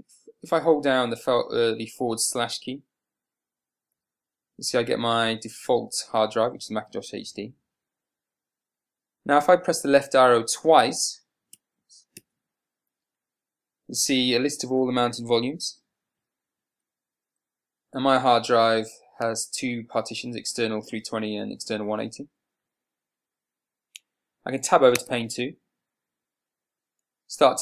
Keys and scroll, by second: 3.7 /, 25.4 Tab.